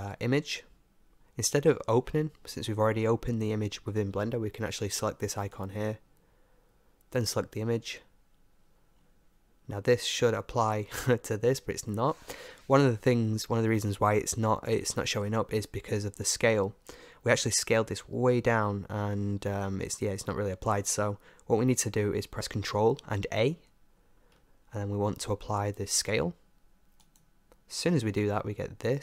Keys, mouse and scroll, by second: 5.4-7.2 drag, 9.0-11.0 middle drag, 12.0-23.5 middle drag, 23.5 ctrl+a, 28.3-29.0 middle drag.